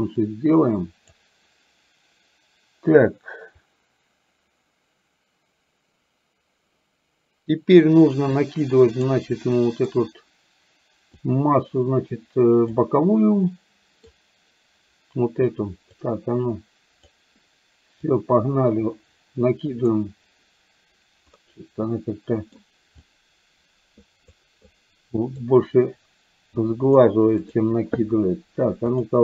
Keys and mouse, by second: 0.2-1.2 drag, 9.0 click, 9.6 middle click, 11.2-12.7 drag, 13.6 middle click, 16.0-17.1 drag, 18.1-20.0 drag, 21.6-22.6 middle drag, 23.1-24.3 drag, 24.8 click, 26.6 click, 27.5 click.